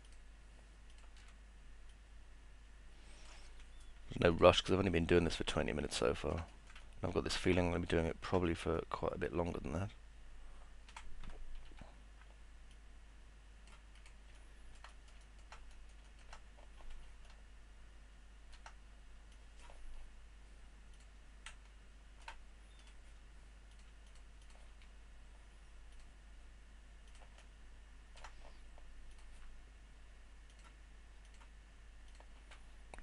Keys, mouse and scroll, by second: 0.0 ctrl+click, 0.9 ctrl+click, 1.9 click, 4.7-6.3 alt+middle drag, 6.5 middle click, 6.8 alt+middle click, 7.7 middle click, 8.1 alt+middle click, 8.5 middle click, 8.8-10.9 alt+middle drag, 15.0 middle click, 15.2 alt+middle click, 15.7 middle click, 16.0 alt+middle click, 17.4-18.5 alt+middle drag, 19.3 click, 21.5 alt+middle click, 22.8 click, 24.1 ctrl+click, 24.4 ctrl+click, 29.1 click.